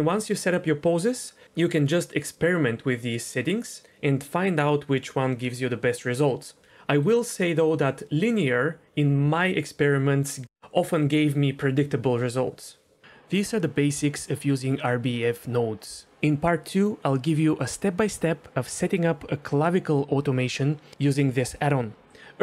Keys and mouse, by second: 2.3-3.8 drag, 7.1-12.5 drag, 13.5 r, 22.3 middle click.